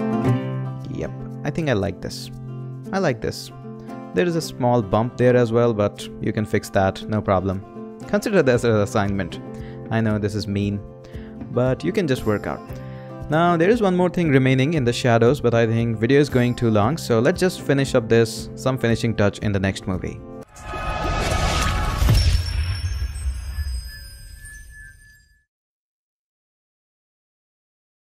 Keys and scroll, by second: 1.5 Return.